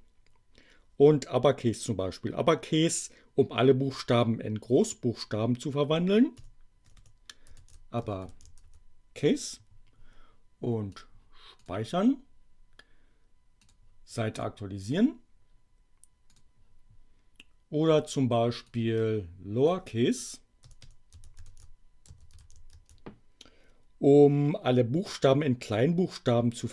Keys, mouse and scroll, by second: 6.4-8.9 typing, 10.9 click, 11.5 click, 13.6 click, 14.3 click, 16.3 click, 18.6-19.8 drag, 20.4-23.2 typing.